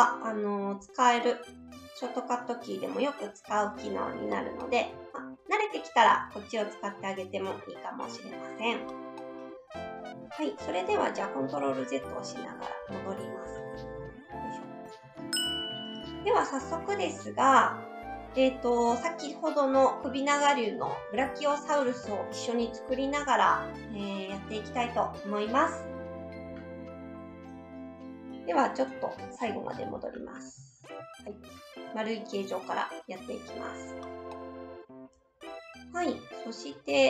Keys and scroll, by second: 4.9 s, 7.0 s, 10.1 ctrl+z, 11.4 ctrl+z, 29.8 ctrl+z, 30.1 ctrl+z.